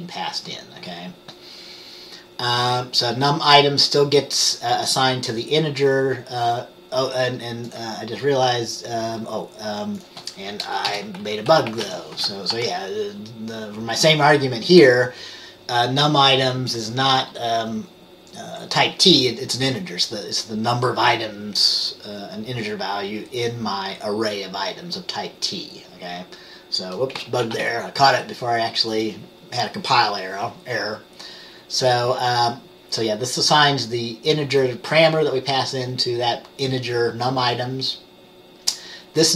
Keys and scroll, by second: 11.0-12.0 typing, 12.7 ctrl+s, 27.6 ctrl+s.